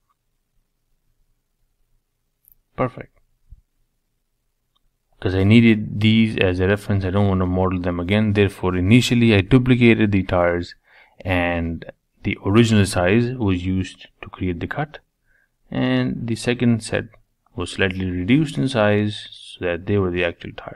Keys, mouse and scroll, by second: 2.4 ctrl+j, 2.8 middle click, 3.3-3.8 scroll up 2, 3.8-7.8 shift+middle drag, 7.8 click, 8.4-10.7 middle drag, 10.7 Tab, 11.3 3, 11.6 click, 12.1 shift+click, 12.5-13.6 middle drag, 13.6-14.2 shift+drag, 14.5-16.0 middle drag, 18.5 e.